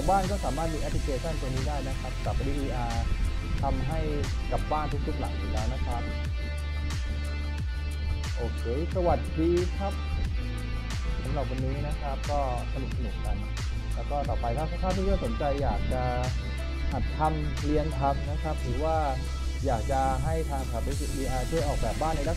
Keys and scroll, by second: 1.4 s, 7.9 w, 15.2 d, 16.5 w, 20.0 d.